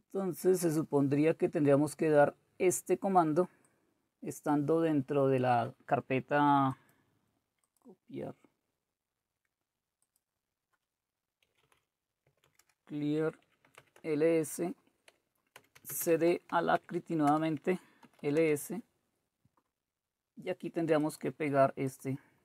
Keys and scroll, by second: 11.4-14.2 typing, 15.3-18.9 typing.